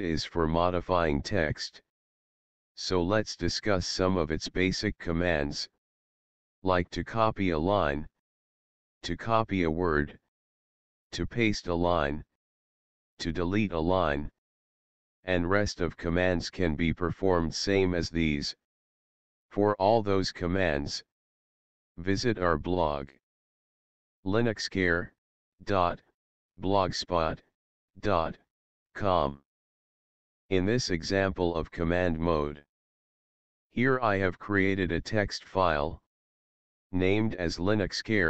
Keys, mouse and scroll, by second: 33.3 Tab, 33.7 click, 36.2 Up.